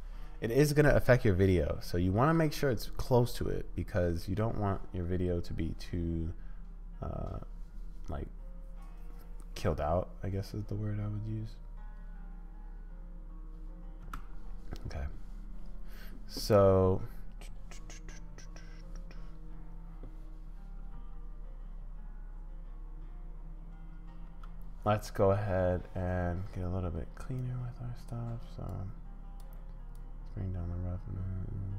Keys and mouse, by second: 14.0 space, 20.9 space, 24.2 space, 27.5 click, 28.7 click, 30.1-31.7 drag.